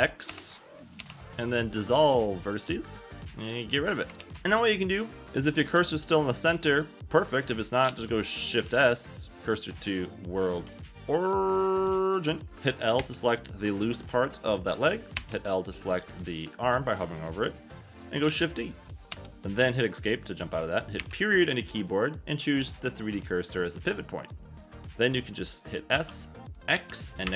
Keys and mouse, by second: 2.3 g, 2.7 click, 3.0 ctrl+a, 3.4 click, 3.7 click, 4.0 g, 4.3 Tab, 4.3 a, 7.9 shift+a, 8.6 shift+s, 12.5 Tab, 12.5 a, 13.0 l, 15.2 l, 18.3 shift+d, 19.1 Escape, 21.0 ., 25.9 s, 26.7 x, 27.3 -.